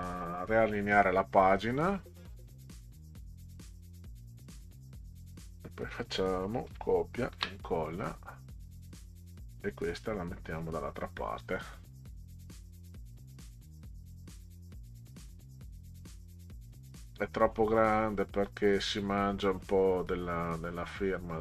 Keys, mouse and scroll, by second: 1.3 click, 2.4-3.6 drag, 6.7 ctrl+c, 7.3 ctrl+v, 8.7-10.6 drag, 11.6 click, 13.0 click, 13.9 click, 15.2-16.7 drag, 18.1 click, 21.2-21.4 drag.